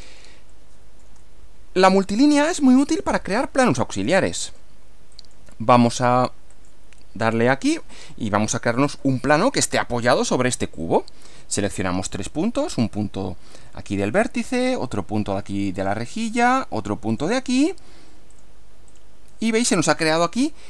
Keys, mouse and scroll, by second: 0.5-2.4 middle drag, 2.6-3.2 shift+middle drag, 4.4 click, 5.1 click, 6.6 click, 8.5 scroll up 1, 9.0 middle click, 14.0 click, 15.8 click, 17.1 click, 18.3 click, 18.9 click.